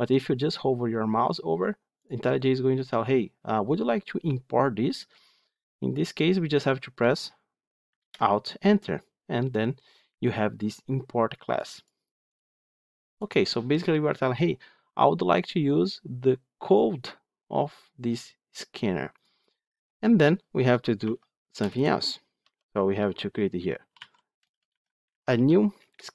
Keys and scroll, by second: 7.9 alt+Return, 25.7 Return.